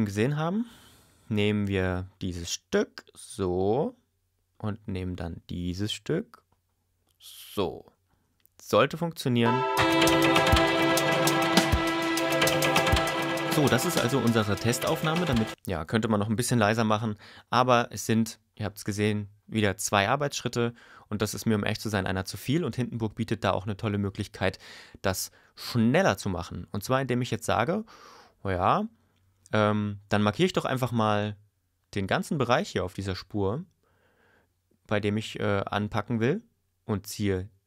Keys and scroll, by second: 9.4 space, 15.5 space, 16.7 y.